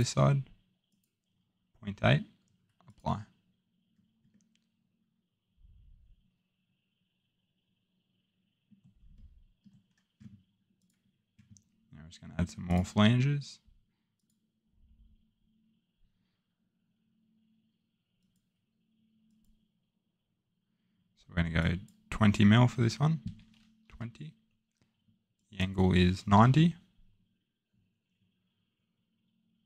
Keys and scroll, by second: 23.2 typing, 26.1-26.8 typing.